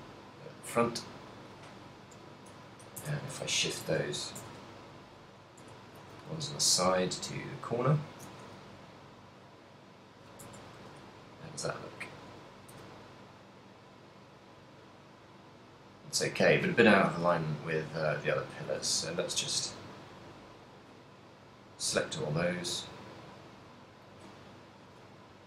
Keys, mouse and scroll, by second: 2.1 KP_7, 2.7 z, 3.1 Tab, 3.6 right click, 3.9 Tab, 4.5 Tab, 5.4 right click, 5.6 Tab, 6.1 a, 6.6 right click, 6.9 g, 8.4 click, 8.4 a, 8.9 right click, 9.5 g, 10.6 Tab, 10.6 click, 11.1 z, 11.5 middle click, 13.0 a, 13.1 middle click, 17.3 KP_7, 17.6 z, 18.4 right click, 18.8 Tab, 19.9 shift+right click, 20.1 shift+right click, 20.9 shift+right click, 21.5 shift+right click, 22.9 g, 24.2 click, 24.9 right click, 25.1 g.